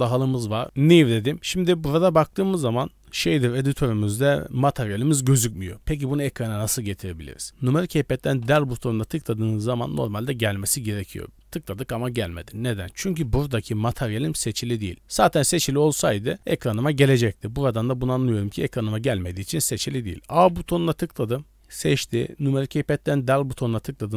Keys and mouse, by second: 0.6 ctrl+z, 0.8 click, 7.5 alt+a, 8.4 KP_Decimal, 20.5 a, 23.3 KP_Decimal.